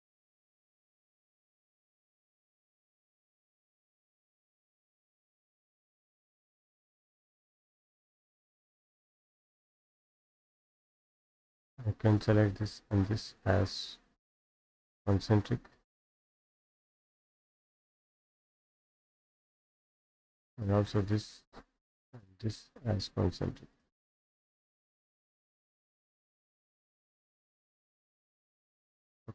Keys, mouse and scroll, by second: 2.9 click, 4.3-5.4 drag, 5.8 click, 7.4-7.7 scroll up 2, 9.4 click, 10.5 click, 10.8 Escape, 11.9 click, 12.3 click, 12.8 click, 15.0 click, 17.6 click, 20.4 click, 21.2-22.2 scroll up 5, 22.2 ctrl+click, 23.8 click, 25.4-26.9 scroll down 9, 27.5 click, 29.0 click.